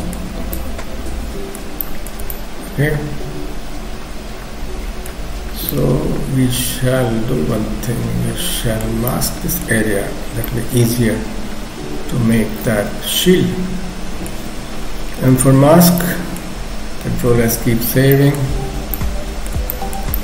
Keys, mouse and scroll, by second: 0.5 middle click, 1.8 shift+middle click, 2.3 middle click, 5.3-5.7 scroll up 3, 5.7 middle click, 9.1 middle click, 9.9-10.3 scroll up 1, 10.5 middle click, 15.2 m, 16.0 middle click, 17.3 ctrl+s, 17.6-18.1 scroll up 1, 18.1 middle click, 18.6-19.1 scroll down 3, 18.9 middle click, 19.7 shift+middle click, 20.1 middle click.